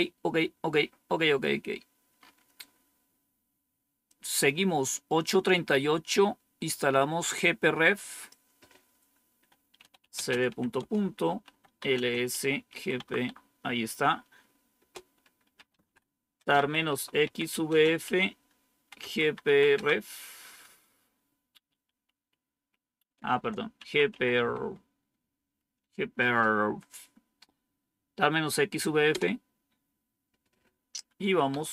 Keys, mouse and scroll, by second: 1.2-2.1 scroll down 2, 2.1-2.5 scroll up 1, 4.0 click, 8.1 click, 9.5-12.9 typing, 14.7-20.2 typing, 23.1-24.0 typing, 24.3 Tab, 29.1 Return, 31.2-31.7 typing.